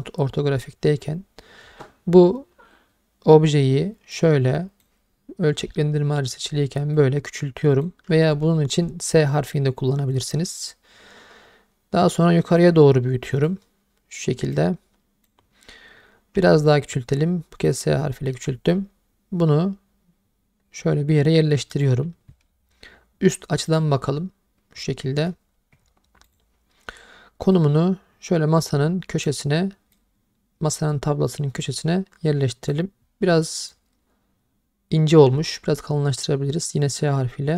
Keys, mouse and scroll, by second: 0.8-1.6 scroll up 1, 4.1 click, 7.0-10.1 drag, 12.6 click, 14.5 click, 16.4 s, 17.7-18.3 drag, 18.3 g, 21.7-23.8 drag, 26.3 click, 27.6-29.3 drag, 31.6 click, 35.4 s.